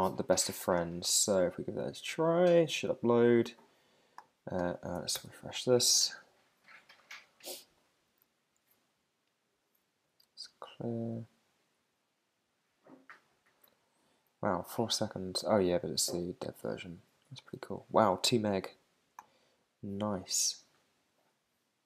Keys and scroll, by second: 5.1 super+r, 8.0 super+`.